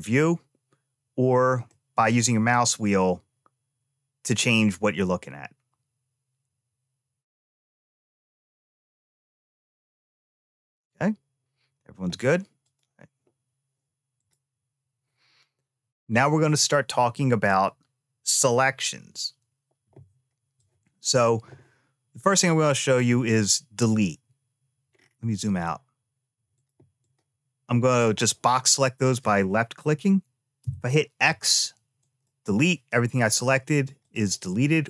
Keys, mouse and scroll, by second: 1.5-4.1 middle drag, 12.4 click, 14.0 click, 20.3 click, 24.7-26.3 scroll down 3, 26.3 click, 26.8-27.9 drag, 30.4 x, 33.8 click.